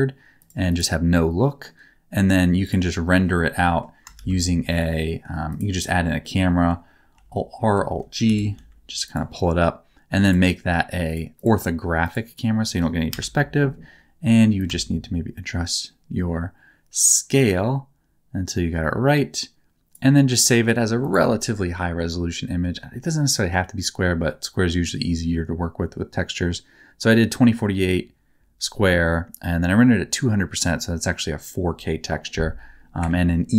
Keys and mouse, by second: 0.5 click, 1.5 middle click, 2.6 click, 3.6 middle click, 4.1 shift+a, 7.1 alt+r, 7.5 alt+g, 8.2 g, 8.5 z, 11.1 click, 11.4 click, 13.1 KP_0, 14.5-19.9 shift+drag.